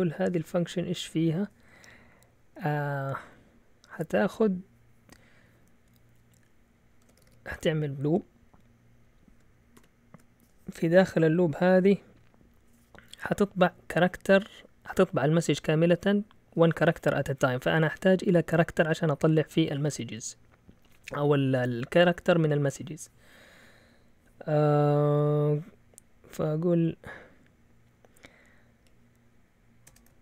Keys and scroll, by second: 6.8-8.1 typing, 9.8 typing, 29.9 Escape.